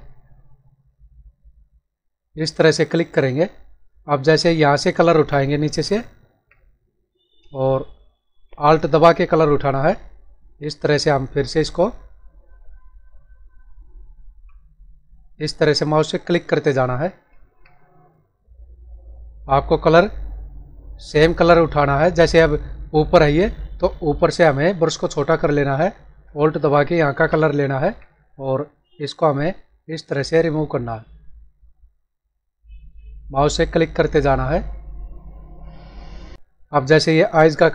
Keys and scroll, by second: 21.1 space.